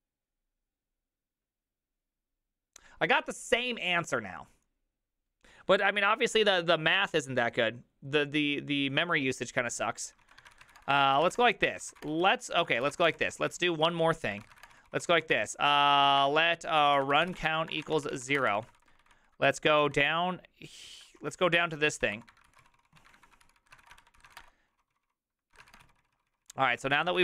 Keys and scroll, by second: 10.2-18.8 typing, 11.8 Return, 11.8 ctrl+c, 12.2 Return, 12.2 ctrl+u, 12.5 ctrl+u, 13.8 ctrl+u, 18.9 ctrl+d, 20.1 ctrl+d, 20.8-27.2 typing, 23.9 Return, 24.0 ctrl+d, 24.2 ctrl+c, 26.3 ctrl+u.